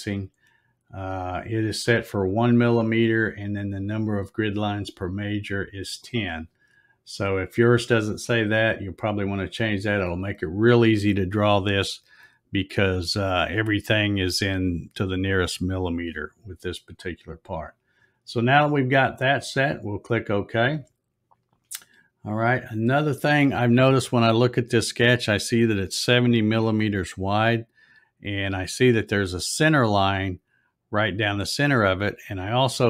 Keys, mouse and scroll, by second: 9.2-9.8 scroll up 3, 20.0 click, 22.2-22.6 scroll down 2.